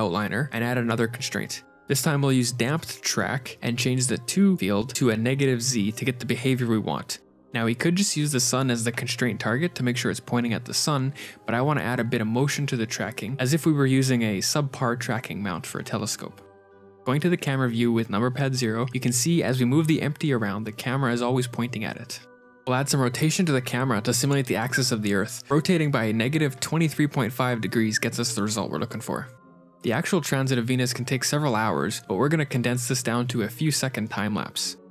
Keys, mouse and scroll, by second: 0.7 click, 3.5 click, 5.4 click, 16.4 click, 17.8 click, 18.3 g, 22.4 r, 24.3 click, 25.2 r.